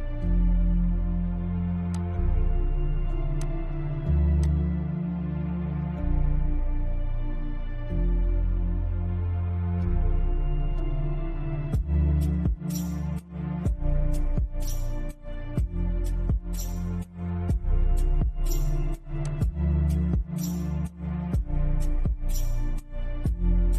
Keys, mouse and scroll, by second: 1.2 click, 5.1 scroll down 1, 5.2-8.5 shift+middle drag, 8.5-8.9 scroll down 1, 10.9-12.4 middle drag, 12.4 scroll up 1, 13.4-18.5 shift+middle drag, 18.5 click, 19.1-19.6 scroll down 1, 23.3 click.